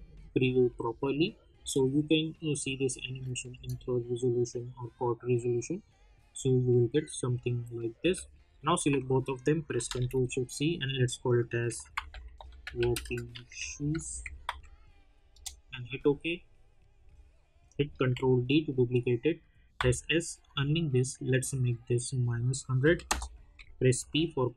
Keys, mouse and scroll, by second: 1.5 space, 1.8 click, 3.5 space, 7.9 space, 8.4 click, 8.8 ctrl+a, 10.0 ctrl+shift+c, 11.4-14.9 typing, 15.3 Return, 17.0 click, 18.1 ctrl+d, 20.0 s, 20.4 click, 22.8 -, 23.0 Return, 24.2 p.